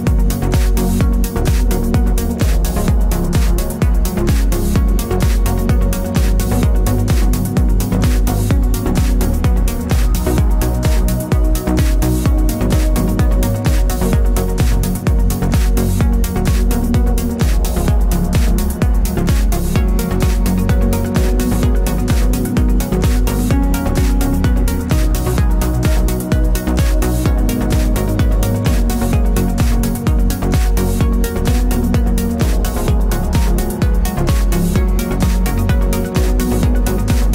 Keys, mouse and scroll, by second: 1.0-3.7 typing, 5.1 KP_Enter, 6.7 v, 7.1 click, 9.9-10.5 typing, 13.8 v, 15.5 click, 18.1 click, 21.0 click, 22.2 click, 24.6 v, 25.3 click, 30.7 KP_Enter, 33.2 click, 33.6 KP_Enter, 34.8 click.